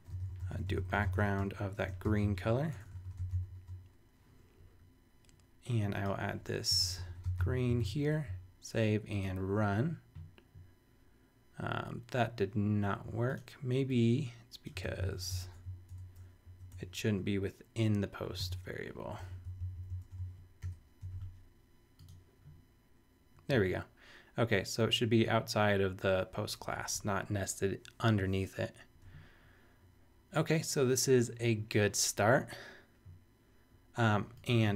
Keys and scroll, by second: 0.0-4.0 typing, 6.5-7.6 typing, 7.7 super+n, 7.8 super+s, 14.8 super+c, 15.1 super+BackSpace, 16.4 Down, 16.7 Return, 18.4 super+v, 19.3 shift+super+v, 19.4 shift+super+Up, 20.2 shift+super+Up, 20.6 shift+super+[, 21.0 super+s.